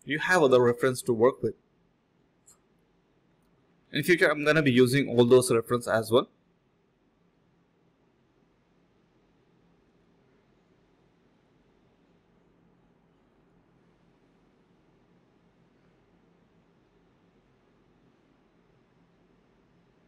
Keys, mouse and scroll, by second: 0.0-0.7 typing, 0.2 ctrl+b, 3.4 typing, 7.2 alt+click, 7.5 alt+click, 8.6 typing, 9.3 alt+click, 9.5 alt+click, 9.9-11.0 typing, 10.4 alt+click, 11.6 alt+click, 11.8 alt+click, 12.1 alt+click, 12.6 alt+click, 12.8-13.6 typing, 14.9-15.3 typing, 15.5 alt+click, 16.5 alt+click, 16.9 alt+click, 19.6-20.0 typing.